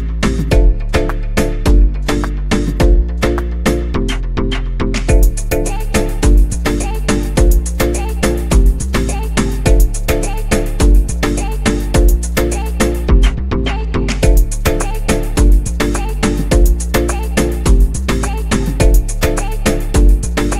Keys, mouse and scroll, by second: 5.1 click, 7.4 space, 9.6 click, 12.1 click, 15.9 click.